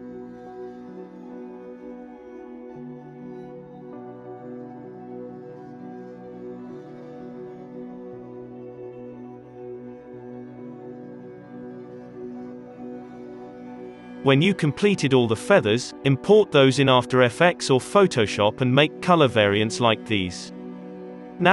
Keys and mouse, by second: 0.5 ctrl+z, 1.4 ctrl+l, 1.4 b, 1.6 f, 1.7-4.0 drag, 1.7 middle click, 1.7-2.4 f, 2.2 middle click, 3.7-6.6 typing, 3.8 alt+a, 4.5 alt+a, 4.6 alt+a, 4.8 alt+a, 5.0 alt+a, 5.1 click, 6.2 alt+a, 6.5 alt+a, 6.7 alt+a, 7.0-8.5 drag, 7.9-12.6 typing, 8.2 ctrl+z, 8.5 click, 9.1 ctrl+z, 9.1 ctrl+z, 9.9 alt+a, 10.2 Tab, 10.2 Tab, 10.3 Tab, 10.7 middle click, 11.6 click, 11.9 middle click, 12.2 middle click, 12.3 Tab, 12.4 alt+a, 12.5 alt+a, 12.5-21.5 middle drag, 13.4 ctrl+s.